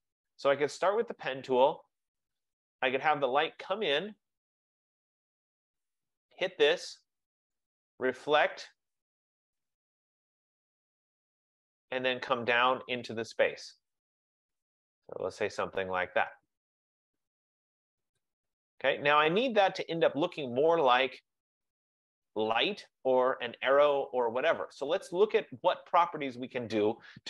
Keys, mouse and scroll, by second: 1.4 click, 4.9 click, 7.7 click, 11.7 click, 18.3 click, 20.4 click, 25.7 F15.